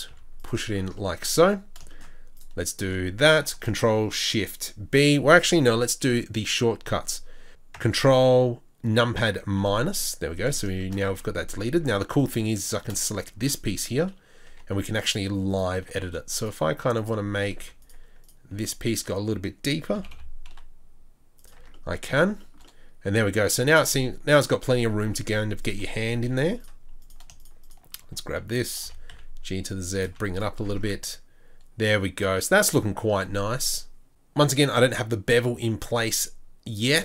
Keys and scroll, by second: 0.1 z, 1.4 Tab, 7.5 ctrl+z, 11.5 Tab, 11.8 Tab, 12.9 shift+Tab, 14.5 2, 16.0 3, 17.6 z, 18.5 z, 19.9 g, 21.6 Tab, 24.9 Tab, 26.2 2, 28.8 g, 30.4 z, 30.7 Tab.